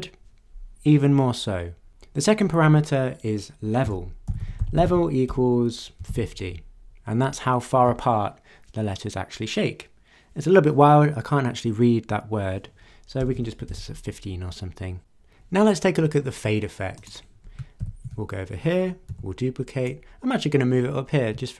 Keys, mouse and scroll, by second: 3.8-6.6 typing, 13.2-14.2 typing, 17.0 click, 17.8 ctrl+d, 19.1 w, 19.8-21.5 drag.